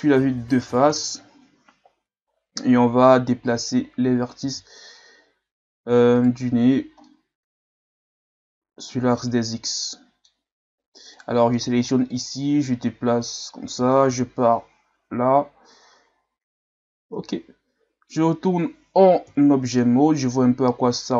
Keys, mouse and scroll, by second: 0.9 KP_1, 3.5 click, 4.4 z, 6.2 right click, 7.0-11.1 middle drag, 11.1 right click, 12.1-14.1 drag, 14.1 KP_1, 17.0 Tab, 17.8-19.1 scroll down 4, 19.1 scroll down 1, 19.2 KP_3, 20.2-21.1 scroll up 7.